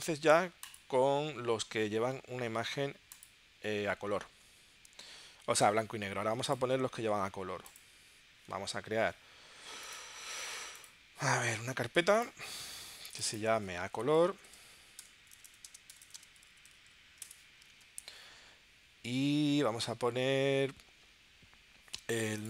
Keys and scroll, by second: 13.8-16.8 typing, 17.2 Return, 17.7 super+Tab.